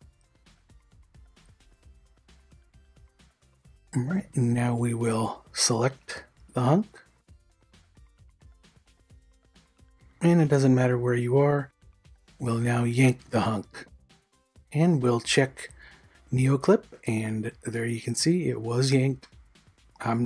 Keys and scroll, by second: 15.5 ctrl+n.